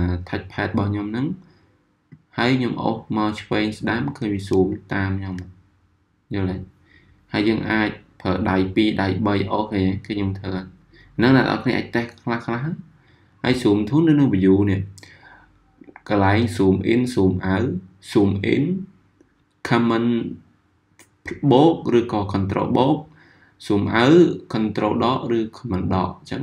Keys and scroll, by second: 4.5 z.